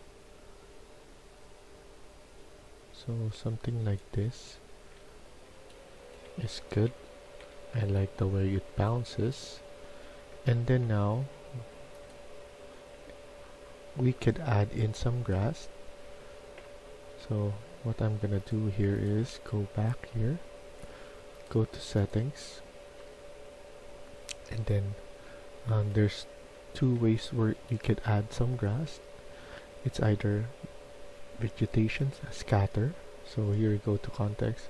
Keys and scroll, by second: 4.1-7.5 typing, 9.5-10.7 typing, 26.2-27.8 typing.